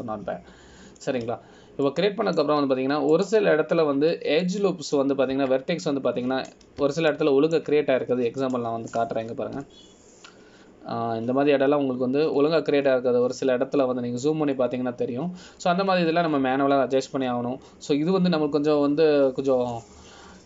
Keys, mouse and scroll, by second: 0.2 middle click, 4.0 shift+middle click, 5.3 click, 6.6 middle click, 7.5 Tab, 8.3-9.0 scroll up 2, 9.3 shift+middle click, 10.7 click, 11.7 KP_Decimal, 14.1-14.5 scroll down 2, 14.9 scroll down 7, 16.7 scroll down 5, 18.5 scroll up 5.